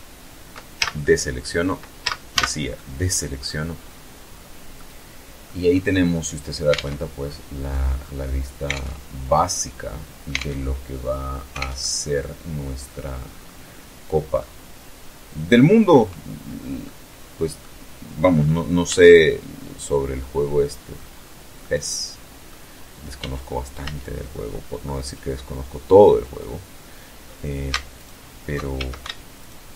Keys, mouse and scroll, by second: 0.7 z, 1.0 a, 1.4 click, 2.4-3.0 scroll up 1, 3.0 scroll down 1, 3.2 scroll up 1, 3.4 click, 4.3-4.7 scroll down 1, 4.7 click, 5.4 alt+Tab, 5.9-6.2 alt+scroll down 1, 6.3-6.9 scroll up 2, 7.4 alt+Tab, 8.2 click, 9.0 alt+Tab, 10.2 alt+Tab, 10.5-11.8 alt+drag, 11.9-12.2 scroll up 2, 13.0-14.5 middle drag, 15.5-16.4 middle drag, 17.0 scroll up 2, 17.5 z, 18.8-19.8 middle drag, 19.8-20.1 scroll down 2, 20.3-21.3 middle drag, 21.8 z, 23.3-23.7 scroll up 2, 23.7 scroll down 2, 23.8 scroll up 2, 26.6 alt+shift+right click, 27.4 alt+shift+a, 28.1 alt+shift+right click, 29.2 scroll down 2, 29.4-29.7 middle drag.